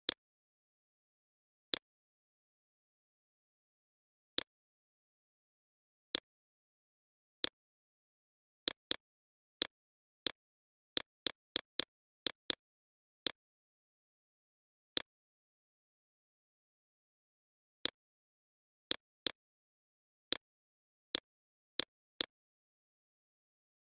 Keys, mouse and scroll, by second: 0.2 click, 0.7 right click, 1.0 click, 6.7 right click, 7.1 click, 14.6 right click, 15.5 click, 17.5 click.